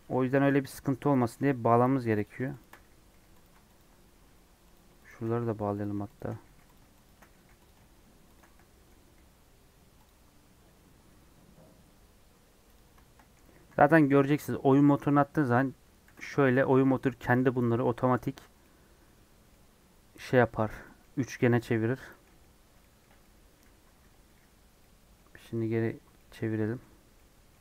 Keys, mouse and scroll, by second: 0.0 scroll down 1, 0.2 shift+middle click, 0.4 scroll up 2, 0.7-1.8 middle drag, 1.8 1, 2.2 click, 3.0 j, 3.4 click, 4.1 j, 4.7 Left, 5.3 j, 5.7 Left, 6.4 j, 6.7 Left, 7.3 j, 7.6 click, 8.7 j, 9.4 scroll down 1, 10.0 click, 10.3 scroll down 1, 12.7 click, 13.5 a, 15.0-15.6 scroll down 3, 16.0 ctrl+t, 17.3 middle click, 17.7 scroll up 2, 17.8 middle click, 18.4 scroll down 2, 18.5-21.8 middle drag, 21.8 scroll up 1, 22.1 middle click, 23.0 scroll down 1, 23.1-24.2 middle drag, 24.2 alt+j, 24.7 middle click, 25.4 Tab, 25.8 Tab, 26.1 middle click, 26.8 Tab, 27.1 middle click, 27.4 Tab.